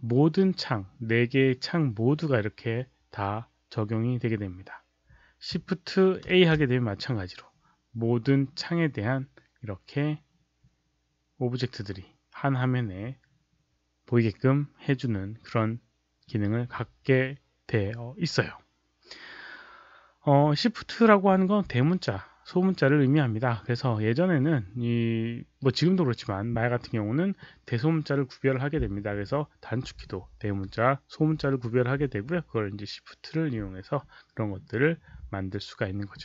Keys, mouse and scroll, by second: 0.5-1.3 typing, 0.8 click, 6.2 shift+a.